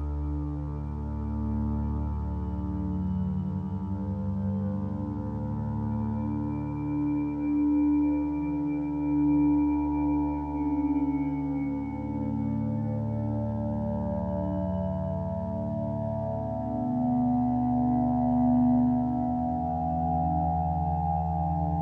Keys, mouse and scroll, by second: 7.4 ctrl+space, 7.9 click, 15.2 ctrl+space.